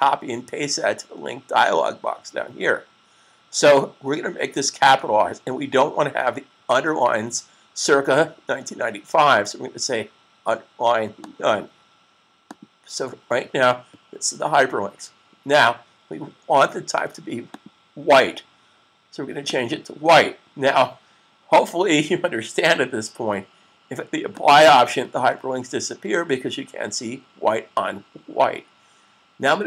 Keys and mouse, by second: 11.2 click, 17.3 click, 24.4 click.